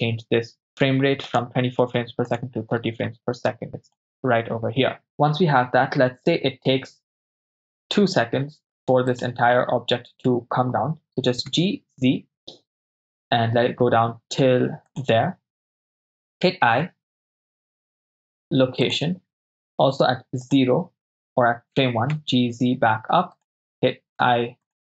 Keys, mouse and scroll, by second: 1.3-2.7 drag, 3.5 click, 9.3 click, 11.1 g, 11.6 z, 14.9-16.5 ctrl+drag, 16.5 i, 20.5 drag, 21.8 g, 22.2 z, 23.4 ctrl+click, 24.2 i.